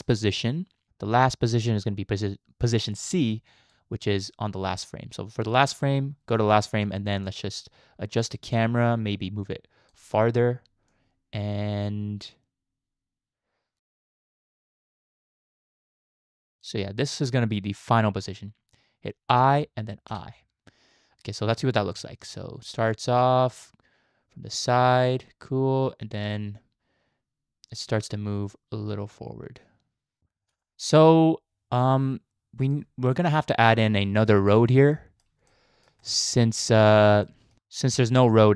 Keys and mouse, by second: 7.3 click, 8.6-9.9 shift+drag, 10.9-13.9 shift+drag, 14.2 shift+click, 14.6 shift+click, 14.8 shift+click, 15.0 shift+click, 15.1 shift+click, 15.3 shift+click, 15.4 shift+click, 15.6 shift+click, 15.7 shift+click, 15.9 shift+click, 16.2 shift+click, 19.3 i, 20.1 i, 21.6 space, 30.2 space, 30.4 space, 30.6-32.7 drag, 33.1 middle click, 34.0 shift+middle drag, 34.5 click, 35.0 middle click, 35.5-35.8 shift+middle drag, 36.0-36.6 middle drag, 37.3 shift+middle click, 37.6 KP_0.